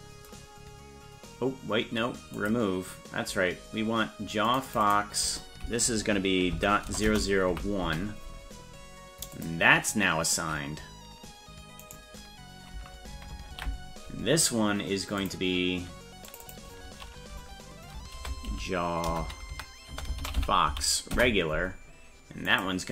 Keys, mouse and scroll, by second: 2.4 click, 4.5 click, 4.7-8.6 drag, 7.1 KP_0, 9.4 click, 11.8 right click, 13.5 ctrl+l, 15.3 click, 16.3 click, 16.5-21.6 drag, 22.5 click.